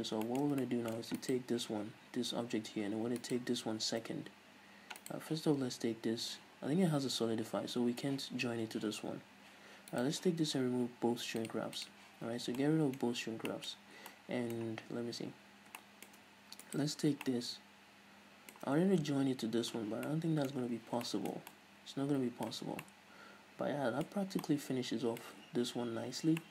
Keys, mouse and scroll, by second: 0.0-0.4 scroll up 2, 0.5-1.5 shift+middle drag, 1.5 right click, 3.5 shift+right click, 5.3 right click, 10.2 right click, 11.7 click, 12.6 scroll down 1, 12.9-17.0 middle drag, 13.3-14.5 scroll up 4, 15.2-15.6 scroll down 2, 15.6-16.1 scroll up 2, 17.0 right click, 17.5-20.7 shift+middle drag, 20.0 scroll down 2, 21.5-26.5 middle drag, 22.9 scroll down 2, 24.4-24.7 scroll up 2, 25.9-26.5 scroll up 2.